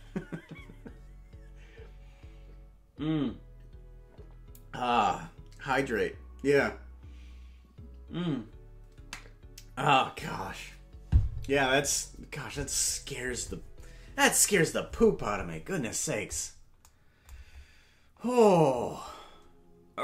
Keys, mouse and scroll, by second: 17.4 scroll down 6.